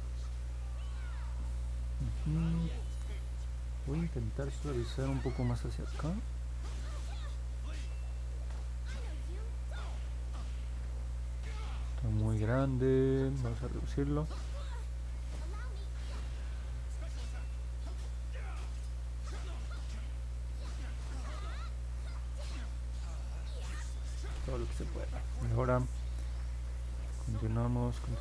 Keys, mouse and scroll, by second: 5.7 click, 6.2 click, 6.8 click, 7.2 click, 7.6 click, 8.2 click, 8.8 click, 9.2 click, 9.8 click, 10.3 click, 10.7 click, 15.3 click, 15.8 click, 16.3 click, 16.7 click, 17.2 click, 17.9 click, 18.3 click, 18.7 click, 19.1 click, 19.5 click, 19.8 click, 20.2 click, 20.6 click, 21.0 click, 21.3 click, 21.7 click, 22.0 click, 22.4 click, 22.7 click.